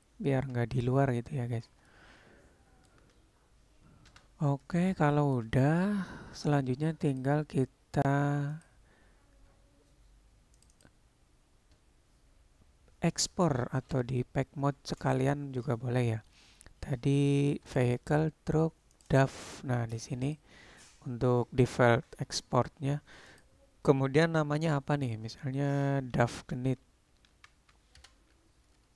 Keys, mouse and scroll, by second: 1.1-1.8 middle drag, 1.9-2.9 shift+middle drag, 4.1 n, 4.7 middle click, 5.1-5.5 shift+middle drag, 8.7 click, 23.5-26.0 drag, 27.5-28.9 drag.